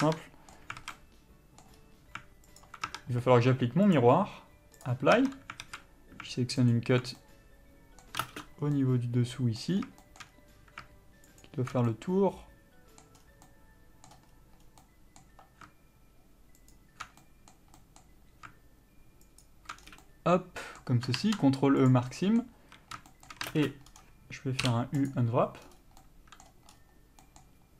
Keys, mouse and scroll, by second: 0.0 scroll up 1, 0.3 middle click, 1.0 alt+a, 1.2 middle click, 2.0-2.8 scroll up 1, 2.8 alt+click, 3.1 Tab, 5.1 click, 5.4 Tab, 5.9 alt+a, 6.9 alt+click, 7.4 middle click, 8.4 ctrl+space, 8.4-11.6 middle drag, 10.0 scroll down 1, 10.5-11.6 scroll up 1, 11.6 alt+shift+click, 12.1-16.9 middle drag, 13.4-13.7 scroll down 1, 14.3 scroll up 1, 14.8 scroll down 1, 16.9 alt+shift+click, 17.4-19.6 middle drag, 19.6 alt+shift+click, 20.0 scroll down 1, 20.2-23.7 middle drag, 22.1 ctrl+e, 22.8 a, 23.7 ctrl+space, 24.1-25.3 scroll up 1, 25.3 u.